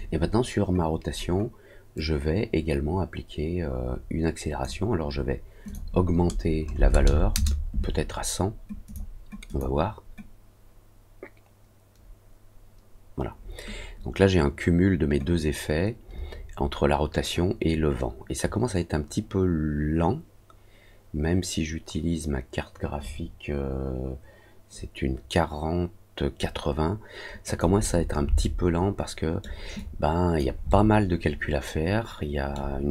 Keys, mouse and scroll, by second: 1.9-4.6 drag, 5.6 click, 8.8 click, 9.4 click, 27.4 click, 28.4-29.4 alt+middle drag, 29.7 alt+click, 30.6-32.5 alt+middle drag.